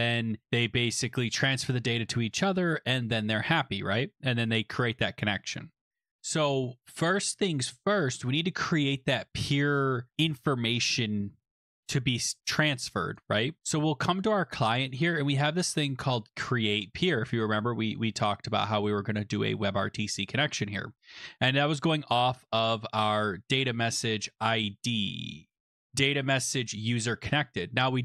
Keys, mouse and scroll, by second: 14.4 click, 15.4 click, 15.8 click, 16.7 Return, 18.1 scroll, 18.8 scroll, 25.4 click, 25.6 click, 27.2 click, 27.4 click.